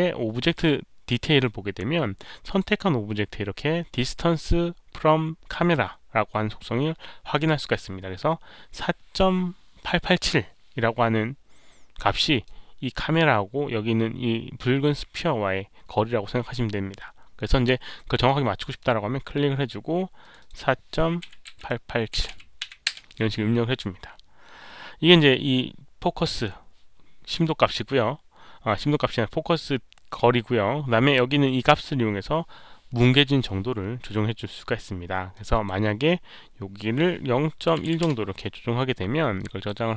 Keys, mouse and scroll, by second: 0.5 click, 0.5 right click, 2.4 click, 2.4 right click, 6.9 click, 7.7 click, 11.3 click, 12.0-12.4 drag, 18.6 click, 20.1 click, 20.3 click, 21.2 click, 21.2-22.8 typing, 22.1 click, 22.8 Return, 26.9 Return, 26.9 KP_7, 32.9 Return, 32.9 KP_7, 35.3 click, 37.9 Return, 37.9 click, 37.9 KP_1, 37.9 KP_Decimal, 39.3 click.